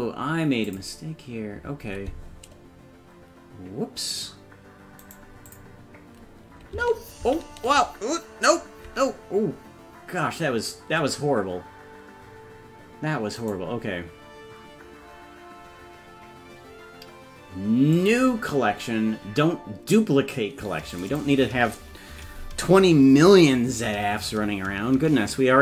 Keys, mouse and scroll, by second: 0.7 click, 5.1 right click, 8.2 ctrl+z, 13.4-18.4 right drag, 19.1-19.8 scroll down 2, 21.0-25.6 drag, 21.0 scroll down 1.